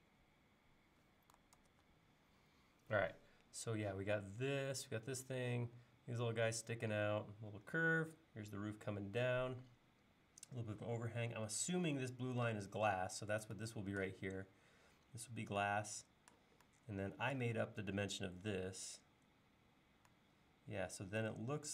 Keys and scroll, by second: 1.6 super+Tab.